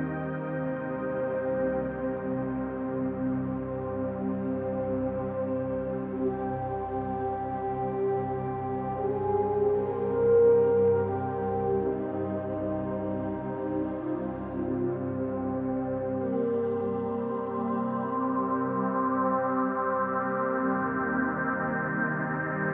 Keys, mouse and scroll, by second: 0.3-0.7 drag, 1.6 1, 1.9 click, 2.4 click, 4.1-4.7 scroll down 2, 5.9-6.8 drag, 7.6-8.4 drag, 9.1-10.0 drag, 11.5 click, 12.9-16.6 drag, 16.9 click, 17.2-17.8 scroll up 2, 17.8-18.6 middle drag, 19.6 middle click, 21.0 alt+z, 22.0 alt+z.